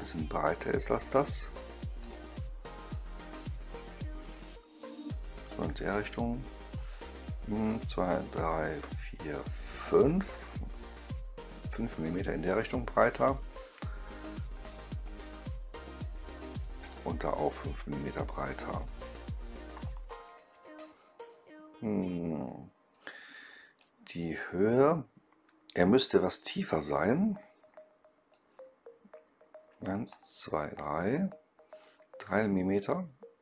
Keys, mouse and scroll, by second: 1.5 click, 1.9 click, 3.3 click, 5.5-10.2 drag, 12.6 right click, 14.5-16.8 drag, 20.0 middle click, 23.7-26.4 right drag, 28.2-33.3 drag.